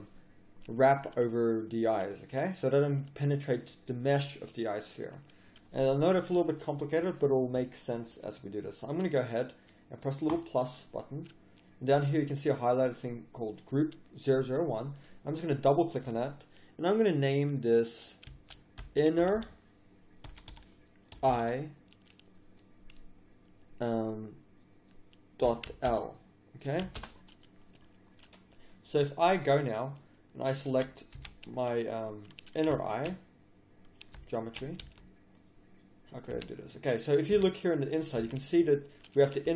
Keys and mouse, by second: 10.3-19.4 drag, 19.4 n, 29.6-30.7 middle drag, 30.7 a, 31.1 a, 33.2 click, 33.6 click, 34.8 z, 36.3 a, 37.3 z, 38.2 z.